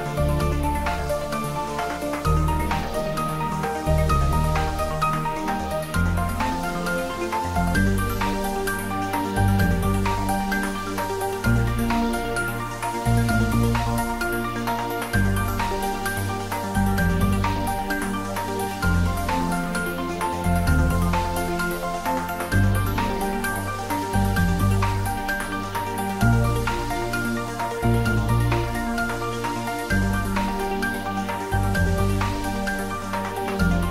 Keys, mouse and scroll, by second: 0.8 Return, 3.2 g, 4.5 Down, 5.8 Right, 6.9 Return, 8.1-8.4 scroll down 1, 8.4-9.0 middle click, 9.0 click, 9.4 scroll up 1, 10.0 shift+z, 10.2-11.4 middle drag, 11.5 scroll up 1, 12.3 click, 12.8-13.3 scroll up 1, 14.7-15.4 middle click, 15.8 click, 16.5 s, 18.8 click, 19.2-19.8 middle click, 19.6-20.5 typing, 22.4 click, 22.8-23.7 middle click, 23.7 scroll up 1, 24.2 click, 24.6 scroll up 1, 26.2 click, 26.7 s, 29.1 click, 30.0-30.3 scroll down 1, 30.3-31.8 middle drag, 33.1 click.